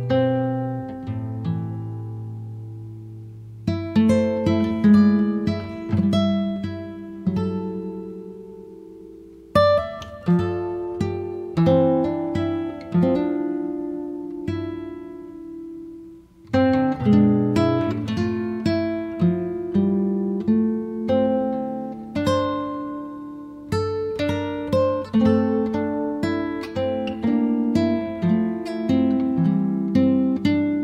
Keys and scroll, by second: 6.9 l, 10.3 space, 28.7-29.7 typing, 30.5 Return.